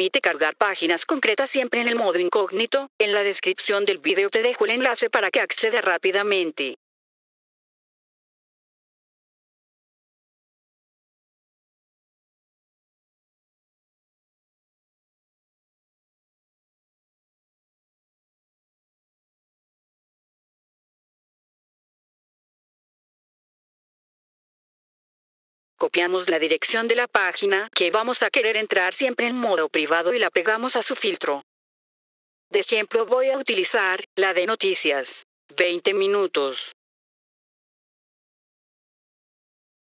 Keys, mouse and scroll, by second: 1.7 right click, 6.1 click, 7.9 click, 9.0 click, 12.1 click, 16.6 click, 24.7 F4, 25.7 click, 28.4 click, 29.1 right click, 31.2 click, 31.9 F4, 32.4 click, 34.8 click, 35.4 click, 35.9 click, 36.7 click, 36.8 click, 37.0 click, 37.5 right click, 38.9 click.